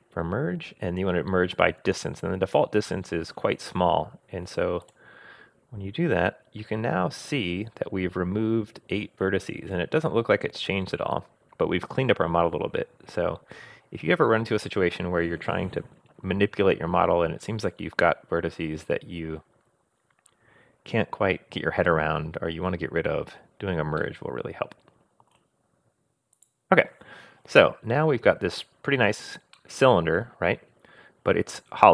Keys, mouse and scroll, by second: 24.0 scroll down 1, 24.0-25.3 middle drag, 26.3 click, 27.3-28.2 scroll down 2, 28.2-28.5 scroll up 2, 29.6-31.0 middle drag.